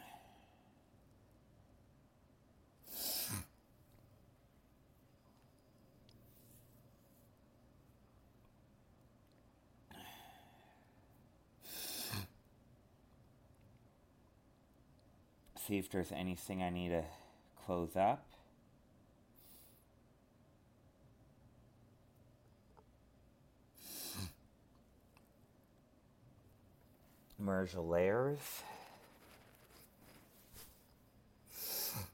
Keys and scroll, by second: 11.1 alt+space, 12.9 alt+space.